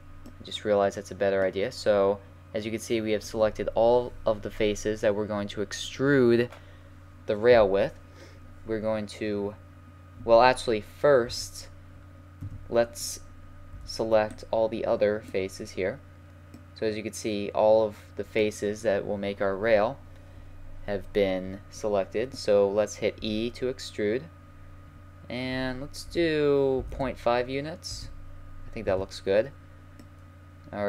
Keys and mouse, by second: 0.2 middle click, 4.9-11.2 middle drag, 11.2 KP_1, 12.4 KP_3, 13.7 b, 16.5 click, 17.1-18.1 middle drag, 23.2 e, 28.8 z, 29.4-30.0 middle drag.